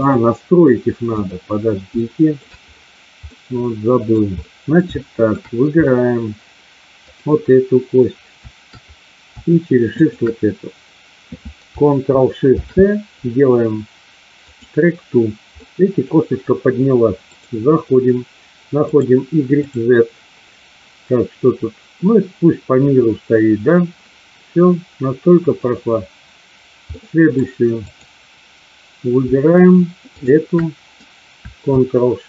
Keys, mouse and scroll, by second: 2.0-2.4 shift+middle drag, 3.2-4.1 middle drag, 4.4 middle drag, 5.0-5.4 shift+middle drag, 10.0-10.7 shift+drag, 12.4 ctrl+shift+c, 15.5-16.0 middle drag, 17.2 click, 18.9 click, 19.6 click, 26.9-27.2 middle drag, 27.9-28.6 drag, 30.1 shift+click.